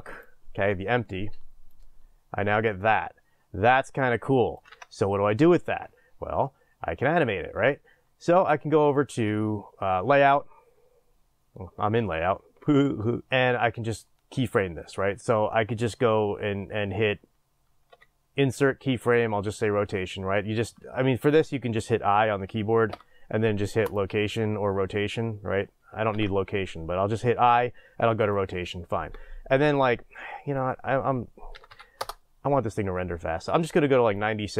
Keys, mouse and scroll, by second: 1.7-34.5 drag, 4.7 ctrl+z, 26.1 ctrl+z.